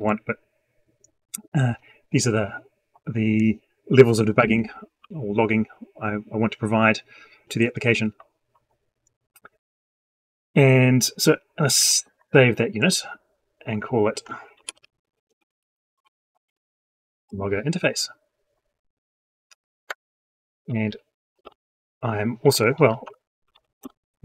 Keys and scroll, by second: 11.9 ctrl+s.